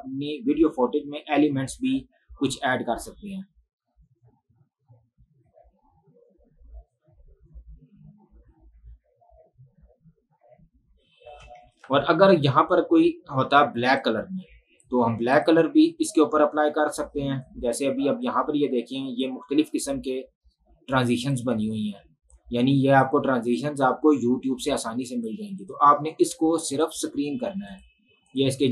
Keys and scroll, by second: 11.5 space, 12.0 ctrl+`, 16.1 Delete.